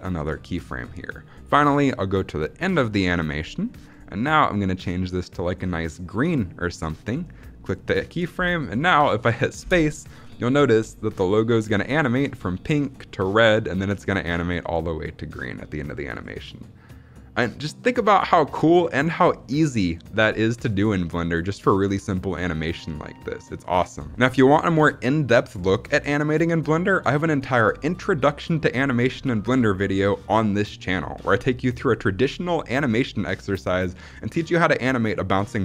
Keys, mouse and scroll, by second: 1.4-3.1 drag, 3.7 click, 7.5 click, 9.5 space, 24.1 space.